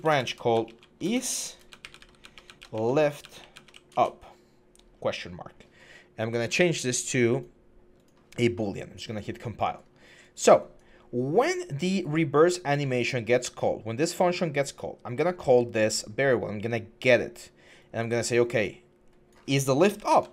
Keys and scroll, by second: 0.0-2.9 typing, 19.7-20.2 typing.